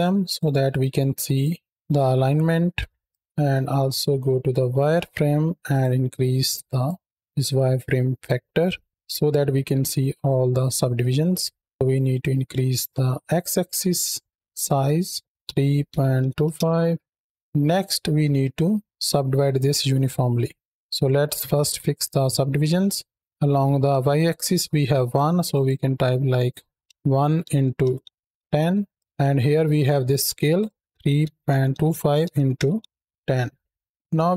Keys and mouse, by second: 0.2-1.2 drag, 1.7 click, 2.1 middle click, 2.9 click, 3.5 z, 5.5-7.6 drag, 8.6 shift+middle click, 11.7-15.1 shift+drag, 15.2-16.4 drag, 25.3-28.3 drag, 30.4-33.1 drag, 34.1 shift+middle drag.